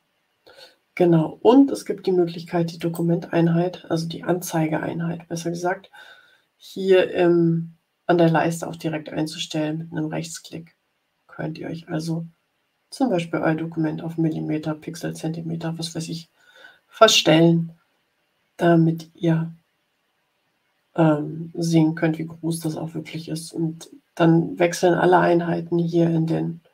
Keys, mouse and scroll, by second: 2.7 click, 22.4 click.